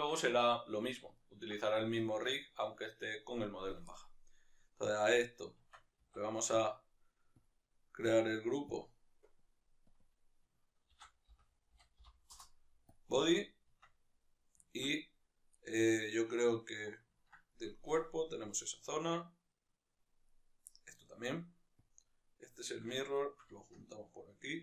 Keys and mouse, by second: 5.7 Tab, 6.0 a, 9.5-10.0 drag, 12.3-14.7 drag, 12.4 Return, 13.9 Tab, 14.7-17.7 ctrl+middle drag, 17.7-20.8 right drag, 20.8-23.2 middle drag, 23.2 shift+right click.